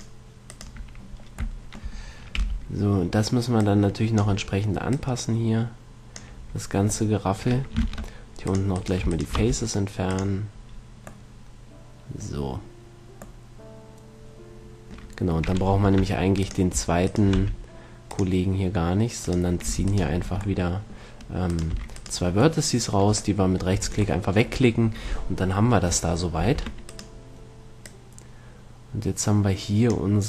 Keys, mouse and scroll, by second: 0.1 right click, 1.4 click, 1.4-4.8 middle drag, 1.4 right click, 2.7 b, 5.2-6.9 drag, 7.3-8.8 middle drag, 8.1 ctrl+Tab, 9.0-11.3 right drag, 9.7 x, 11.0 middle click, 11.1 click, 16.1 ctrl+Tab, 17.3-20.7 right drag, 17.7 x, 19.1 click, 19.1 middle click, 19.9 e, 22.1 e, 24.1 a, 26.9 Tab, 27.1-28.9 right drag, 28.2-29.8 drag.